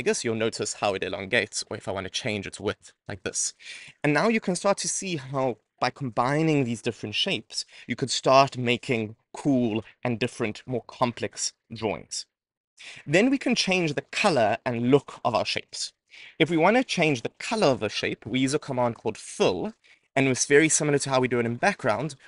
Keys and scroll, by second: 16.0 Return, 16.7 Return.